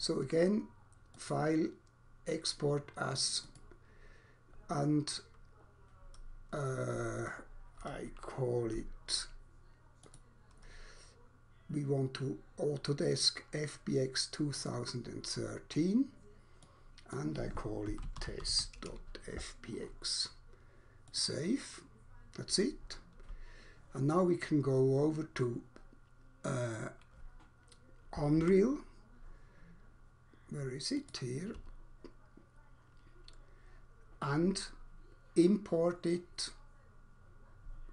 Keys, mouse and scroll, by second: 1.1 click, 3.4 click, 10.1 click, 14.4 click, 16.6 click, 17.1 click, 17.7-18.9 typing, 21.1 click, 28.4 alt+Tab, 30.9 alt+click.